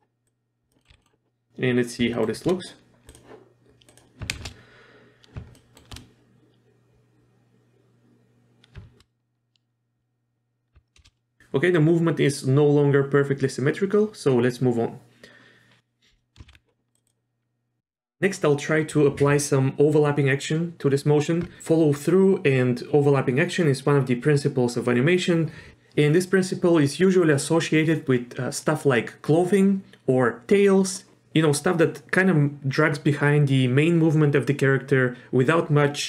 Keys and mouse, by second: 0.3-0.7 drag, 0.8 middle click, 0.9 z, 1.0 middle click, 2.1 shift+middle click, 3.1 click, 3.9 drag, 4.3 shift+space, 5.6 shift+middle drag, 9.0 shift+space, 11.0 shift+space, 16.5 ctrl+shift+s, 16.5 a.